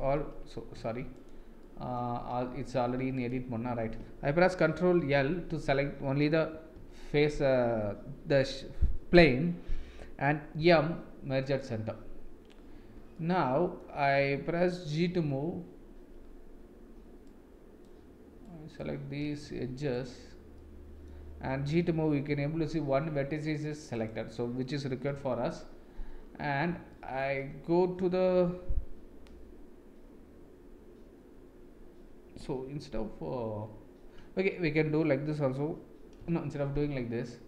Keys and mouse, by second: 0.1-0.5 middle drag, 0.7 Tab, 1.1 click, 1.6 middle click, 2.5 a, 3.2 click, 5.0 ctrl+l, 6.7 KP_1, 10.6 m, 13.1 middle click, 15.1 g, 17.3 click, 18.4 click, 19.4 1, 19.9 click, 20.6 middle click, 22.2 g, 25.1 KP_1, 26.9 shift+middle click, 36.2 Delete.